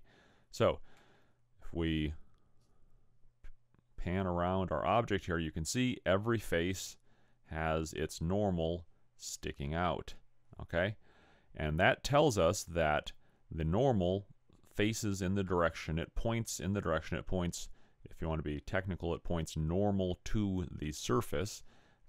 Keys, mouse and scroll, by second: 1.3 middle click.